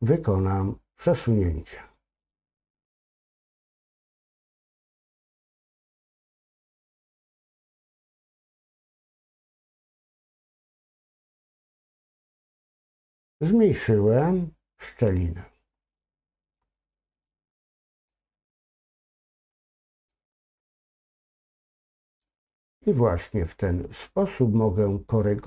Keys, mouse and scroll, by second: 1.3-1.6 scroll up 1, 1.6 click, 2.5-9.1 drag, 10.8 click, 15.4-15.9 scroll down 2, 15.9 middle click, 16.9-17.2 scroll up 2, 17.2 middle click, 19.5 middle click.